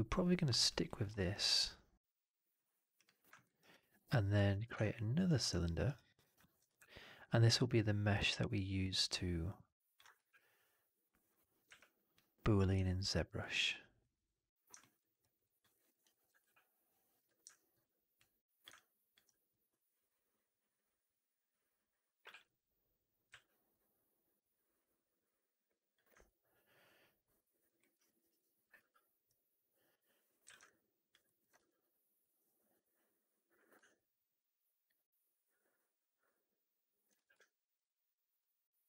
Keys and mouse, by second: 0.7 alt+middle drag, 1.1 alt+right drag, 2.8 drag, 3.2 alt+middle drag, 3.3 alt+right drag, 3.6-4.3 alt+drag, 4.6 shift+Tab, 5.5 alt+right click, 5.7 alt+right click, 6.1 alt+right drag, 6.3 alt+drag, 6.5 e, 7.4-9.8 ctrl+drag, 11.5 w, 12.7 alt+drag, 14.7 alt+middle drag, 14.8 alt+right drag, 15.1 alt+right drag, 15.3 alt+drag, 15.6 alt+middle drag, 15.8 alt+right drag, 16.0 alt+click, 16.9 middle click, 17.1 w, 17.4 alt+click, 18.6 alt+click, 19.4-22.1 drag, 23.2 w, 26.1-27.5 alt+drag, 27.7 alt+middle drag, 27.8 alt+right drag, 28.0 alt+right drag, 28.2 alt+drag, 30.3 w, 30.5-31.0 alt+drag, 31.1 alt+middle drag, 31.4 e, 33.3-36.9 drag, 37.0 w, 38.3 click.